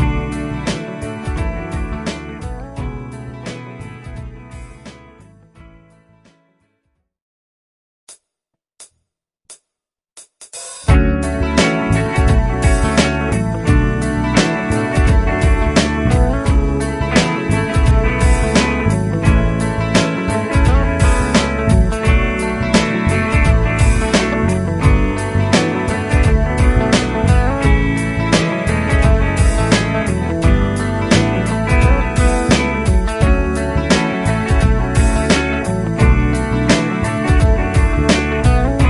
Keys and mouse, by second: 5.4 shift+Page_Up, 11.9 Up, 12.1 Up, 13.0 Left, 13.0 Up, 14.9 Left, 15.2 Left, 15.9 Left, 16.3 Down, 16.4 Down, 16.6 Down, 16.8 Left, 18.3 Right, 18.7 Left, 19.0 Left, 20.0 shift+\, 21.5 shift+click, 28.9 double click, 31.9 shift+Page_Up.